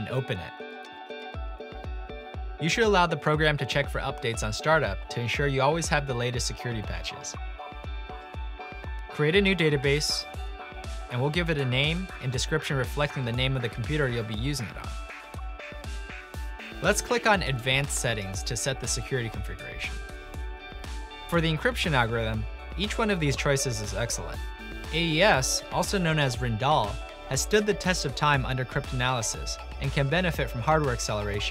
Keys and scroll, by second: 1.5-3.1 typing, 9.7-15.8 typing, 21.2 typing, 24.1 typing.